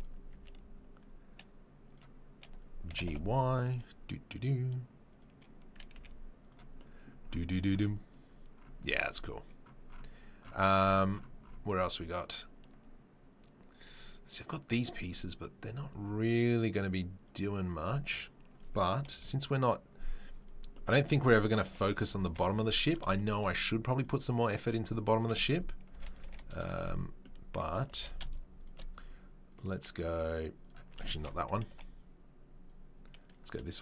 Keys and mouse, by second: 0.3 s, 2.9 g, 17.2 click, 17.9-24.4 middle drag, 21.6 KP_7, 22.2 KP_7, 24.4 click, 25.3-29.5 middle drag, 25.9 r, 27.9 g, 30.6 click, 30.6 g, 31.3-32.6 middle drag, 31.7 Delete, 32.6-33.3 drag, 33.3-33.8 middle drag.